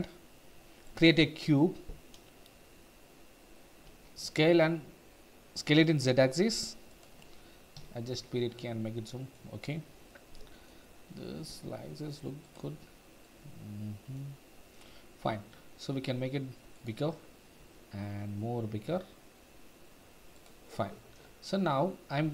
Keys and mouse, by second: 4.0 s, 4.2 z, 7.8 KP_Decimal, 9.1 middle click, 9.7-10.7 middle drag, 11.5 s, 13.2-13.6 middle drag, 13.7-14.1 middle drag, 15.3 s, 17.6 s, 20.3 click.